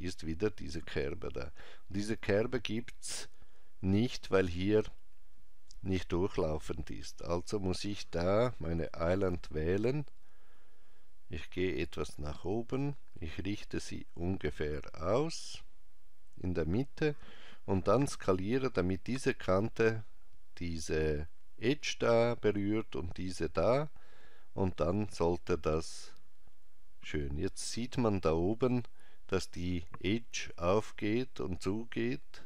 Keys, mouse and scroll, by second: 7.3 click, 9.2 g, 24.8 s.